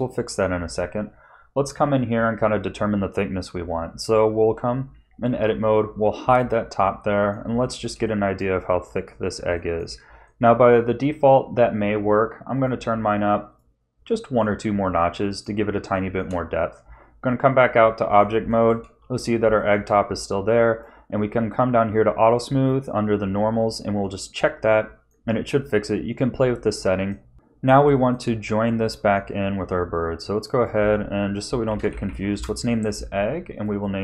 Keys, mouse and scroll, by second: 0.1 middle click, 2.7 Tab, 5.2 l, 6.2 h, 6.8 middle click, 7.6 shift+middle click, 8.0 middle click, 8.7-9.2 scroll up 2, 9.5 shift+middle click, 10.2 middle click, 12.5 click, 13.5 click, 14.4 middle click, 15.9 shift+middle click, 16.8 Tab, 17.7 middle click, 18.5 shift+middle click, 19.2 scroll down 2, 19.6 shift+middle click, 20.7 click, 24.0 click, 24.7 middle click, 26.8 middle click, 27.3 middle click, 27.3 scroll down 2, 27.9 shift+middle click, 28.8 middle click, 30.3 click, 30.5 click, 32.0 g, 33.5 click, 33.7 click.